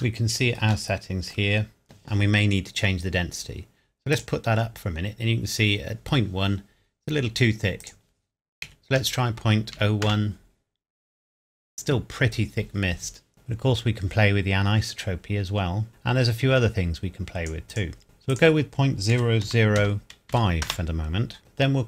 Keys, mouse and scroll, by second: 0.9-1.5 shift+middle drag, 1.6 scroll up 2, 1.8-3.0 scroll down 2, 4.1 click, 6.6 scroll down 1, 7.8 click, 8.7 KP_Decimal, 9.0 KP_0, 9.7 KP_1, 10.1 KP_Enter, 13.3 click, 18.0 KP_Enter, 18.3 click, 19.1 KP_Decimal, 19.4 KP_0, 20.3 KP_5, 20.7 KP_Enter.